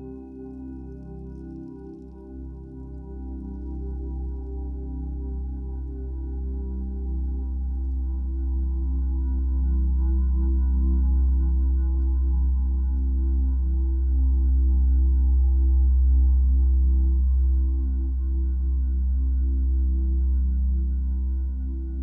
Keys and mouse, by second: 1.7 Return, 2.2-2.8 typing, 3.4 click, 4.9-5.4 typing, 7.2 t, 7.9 alt+click, 9.4 click, 10.5 Return, 11.1 click, 12.4 click, 12.5 Return, 13.2 t, 14.0 alt+click, 14.9 click, 16.9 Return, 17.4 v, 17.7 click, 18.7 c, 19.5 click, 19.8 ctrl+alt+click, 21.1 ctrl+t, 21.1 ctrl+t.